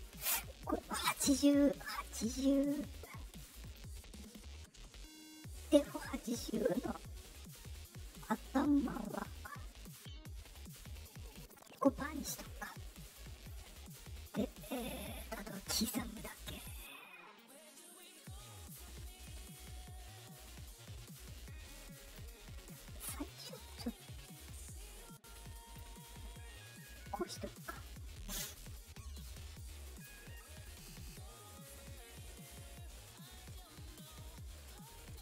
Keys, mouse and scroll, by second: 0.0 right click, 3.6 click, 6.3-11.4 drag, 14.4 click, 14.6 click, 15.3 middle click, 17.3 click, 21.6 click, 22.6 click, 23.2-25.7 drag, 26.7 right click, 28.2 right click, 28.8 right click, 29.5 click, 30.5 right click, 31.3 right click, 33.1 right click, 34.6 right click.